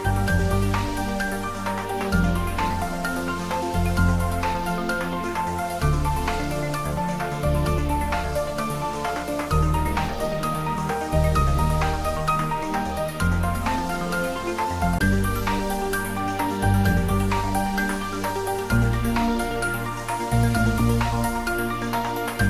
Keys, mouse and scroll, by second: 1.0 middle click, 3.3-3.8 scroll up 1, 3.8 middle click, 5.1 e, 8.9 click, 9.3-9.8 scroll up 1, 9.8 2, 10.2-11.5 scroll up 1, 11.8 ctrl+b, 14.0 click, 15.6 click, 16.5 ctrl+z, 17.3 click, 18.0 alt+shift+click, 19.6 ctrl+b, 22.0-22.4 scroll up 1.